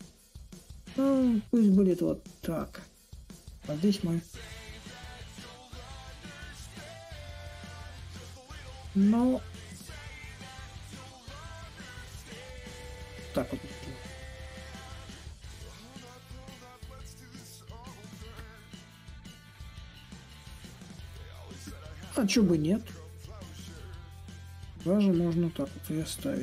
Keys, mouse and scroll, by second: 4.6-9.7 drag, 10.1-15.2 drag, 15.7-20.8 drag, 21.4-26.4 drag.